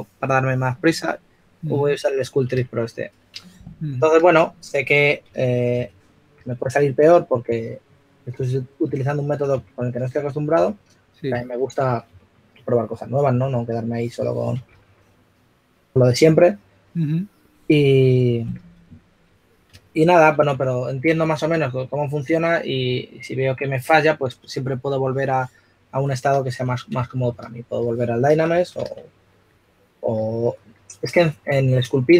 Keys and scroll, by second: 6.7-7.9 typing, 11.7-12.6 typing, 14.0 4, 18.1 s, 22.9 s, 29.0 shift+s, 29.8 s.